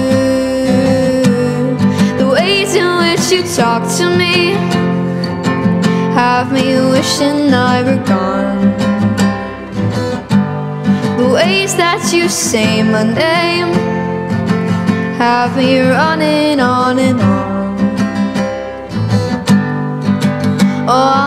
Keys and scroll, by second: 10.0 Return, 13.3 p.